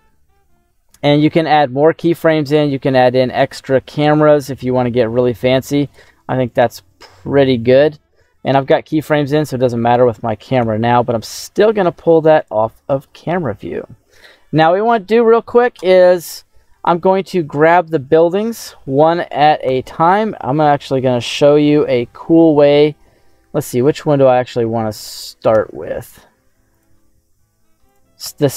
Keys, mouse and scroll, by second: 5.9 click, 6.8 middle click, 8.9 middle click, 8.9 scroll down 1, 10.5 n, 12.3 click, 12.8 n, 13.3-14.5 middle drag, 14.7 right click, 16.0-16.4 scroll down 2, 16.7 middle click, 17.7 scroll down 1, 18.5 click, 19.6 /, 20.6-22.7 middle drag, 26.6 click, 27.8 click, 28.2 /.